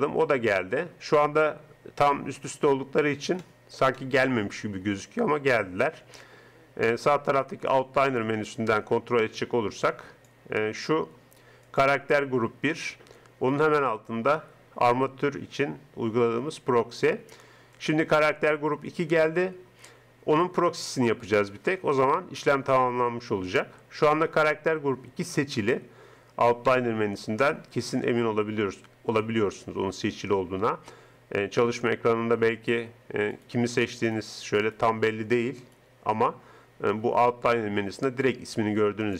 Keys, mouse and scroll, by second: 0.0-1.4 drag, 3.4-6.5 middle drag, 7.8-10.0 drag, 10.1 click, 32.6-37.4 right drag, 39.0-39.1 drag.